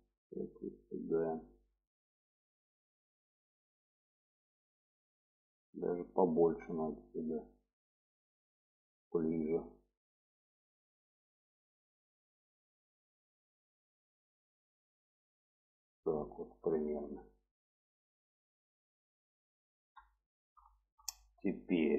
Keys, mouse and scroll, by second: 0.5 click, 2.0 shift+middle drag, 5.9 click, 6.9 click, 7.5 click, 8.7 click, 9.2 click, 11.0 click, 11.8 click, 12.4 click, 13.8 click, 14.5 click, 17.0 click, 17.7-19.1 middle drag, 19.6 middle click, 20.8 shift+middle click, 21.6 shift+middle click.